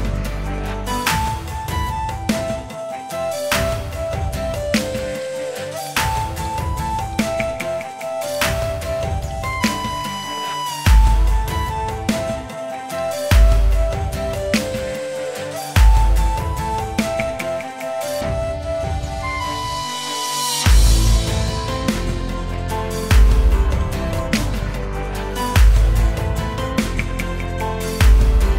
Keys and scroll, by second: 0.1 ctrl+v, 2.1 alt+space, 2.5 Escape, 3.3 space, 3.6 space, 3.9 ctrl+;, 4.0 ctrl+', 7.1 space, 7.4 space, 8.1 ctrl+space, 9.0 space, 9.8 space, 18.0 ctrl+z, 18.4 ctrl+', 25.1 ctrl+z, 27.3 ctrl+z.